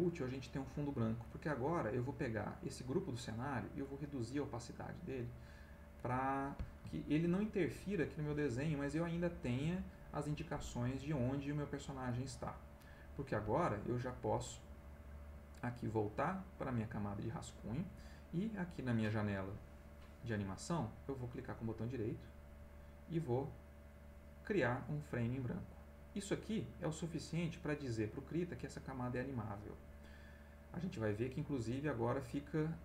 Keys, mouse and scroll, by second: 1.1 click, 3.8-5.2 drag, 6.5 middle click, 8.0 middle click, 12.1 middle click, 16.4 click, 19.2 click, 22.2 right click, 25.1 click.